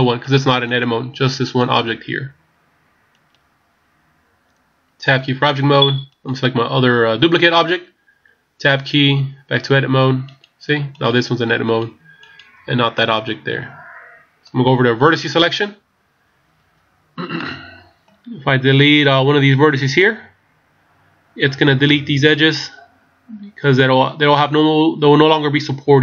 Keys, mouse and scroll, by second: 1.5 right click, 5.1 Tab, 6.1 right click, 9.0 Tab, 10.2 right click, 11.0 right click, 13.0 middle click, 15.4 click, 16.8-17.4 scroll up 1, 17.4 middle click, 19.9 right click, 20.4-20.7 scroll up 2.